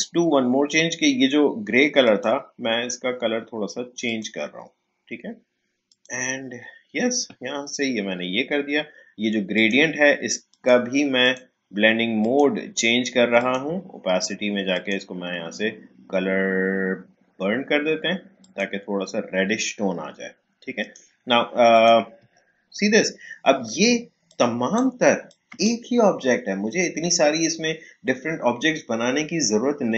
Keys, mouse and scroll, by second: 2.0 click, 9.5 click, 18.4 click, 20.8 click, 22.5-23.2 alt+scroll up 1, 23.2-23.6 alt+scroll down 1, 24.2-28.2 drag.